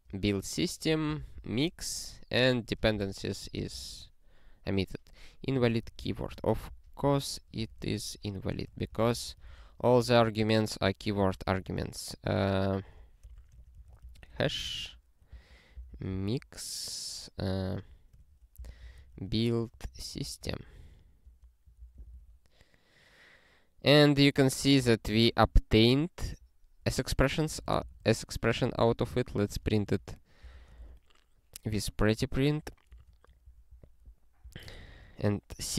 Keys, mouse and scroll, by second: 0.1-1.8 typing, 3.0 ctrl+g, 3.3 ctrl+e, 6.0 alt+b, 6.2 alt+b, 6.4 alt+b, 6.6 alt+b, 7.0 alt+b, 7.5 ctrl+b, 7.8-10.0 typing, 10.0 alt+f, 10.2 alt+f, 10.8 alt+f, 11.3 ctrl+f, 11.6-14.4 typing, 14.5 alt+f, 15.3 ctrl+b, 15.7 ctrl+b, 15.9 ctrl+b, 16.1 ctrl+b, 17.5-21.2 typing, 21.8 ctrl+e, 24.4 ctrl+p, 24.7 Return, 26.2 ctrl+p, 26.9-30.7 typing, 32.0 ~, 32.4 y, 33.0 alt+shift+s, 33.5 ctrl+n, 33.7 ctrl+n, 34.6 ctrl+e.